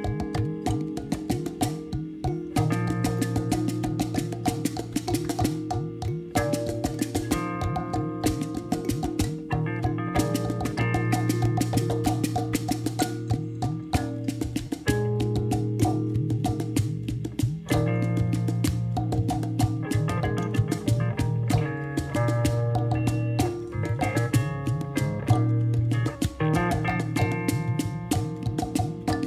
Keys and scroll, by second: 18.5 0, 18.7 ., 19.0 0, 19.2 1, 19.6 Return.